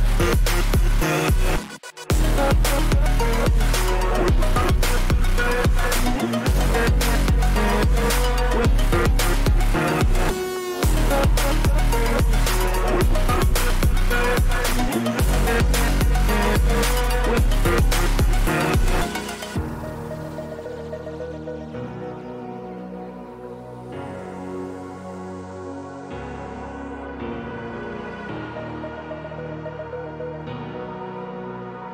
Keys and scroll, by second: 5.2 ], 11.6 ctrl+=.